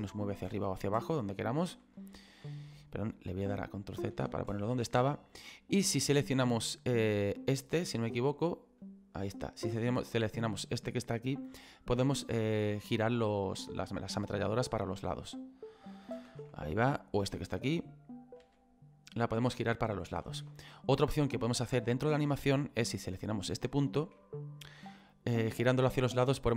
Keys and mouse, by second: 0.2 click, 1.8 ctrl+s, 5.1 middle click, 6.6 right click, 14.5 click, 17.1 right click, 20.1 click, 20.3 ctrl+z, 20.7 middle click, 22.9 right click, 23.8 shift+middle click.